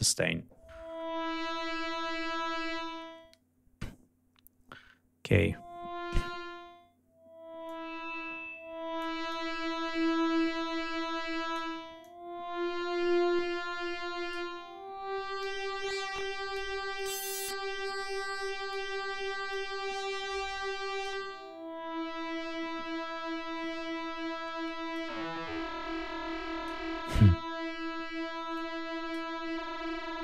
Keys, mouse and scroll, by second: 7.6-9.2 drag, 9.3-11.7 drag, 12.0-14.5 drag, 15.4-16.7 drag, 16.9-18.9 drag, 19.5-21.2 drag, 24.9-26.8 drag, 27.0-27.5 scroll down 4, 28.5 click, 29.6 scroll up 2.